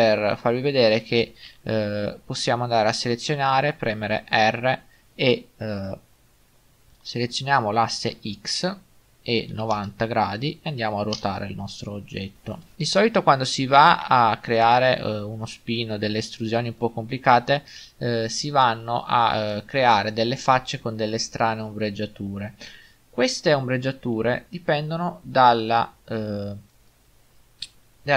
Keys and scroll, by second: 1.5 a, 4.2 r, 8.2 x, 14.1 Tab.